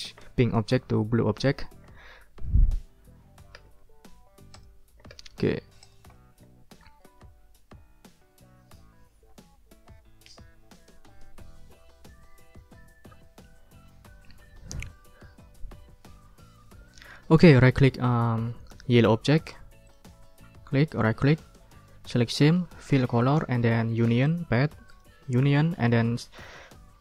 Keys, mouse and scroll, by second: 3.5 d, 4.5 click, 5.1 d, 5.5 ctrl+scroll down 2, 5.8-6.8 ctrl+drag, 13.2 ctrl+scroll up 2, 14.3 ctrl+scroll up 2, 17.6-18.0 scroll up 3, 18.8 scroll up 2, 19.4 scroll up 2, 19.8 click, 20.9 right click, 22.8 click, 23.2 middle click, 24.2 click, 24.9 click, 25.4 click.